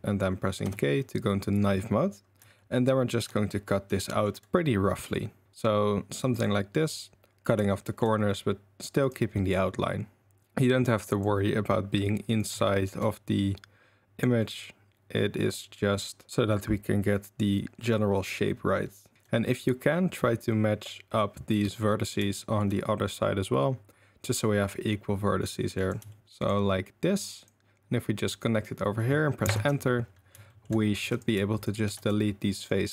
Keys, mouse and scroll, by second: 0.6 k, 2.5 shift+click, 2.7 shift+middle click, 4.2 shift+middle click, 7.9-10.2 shift+middle drag, 12.5 shift+middle click, 19.1 shift+middle click, 22.2 shift+middle click, 26.1 shift+middle click, 30.5 shift+middle drag, 31.1 click, 31.1 3, 31.6 shift+click, 31.9 x.